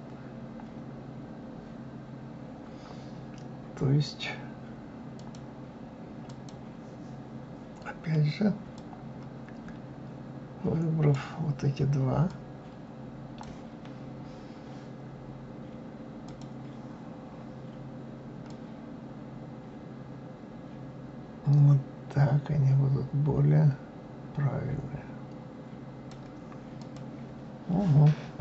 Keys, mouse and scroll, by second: 5.2-6.7 drag, 8.7-11.8 drag, 12.3-15.3 drag, 16.2 click, 18.5-21.5 drag, 26.8 click.